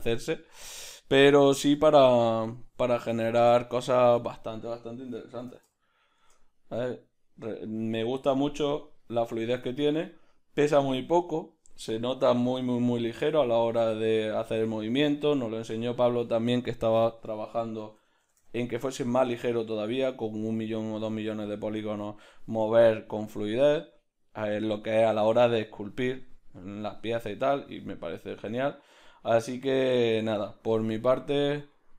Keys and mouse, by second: 6.2 0, 18.9 0.